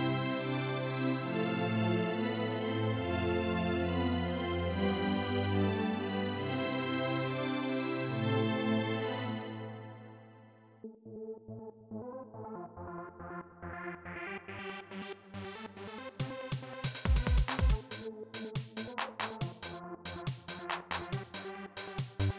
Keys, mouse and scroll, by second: 0.1 click, 2.5-4.1 drag, 7.9 click, 8.9 space, 10.1 click, 10.5 space, 20.6 click, 21.6 click.